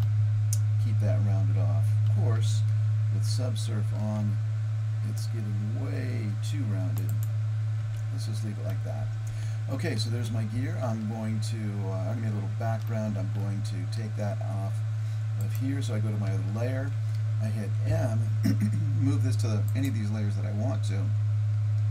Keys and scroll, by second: 3.9 ctrl+r, 7.9 Tab, 17.9 m.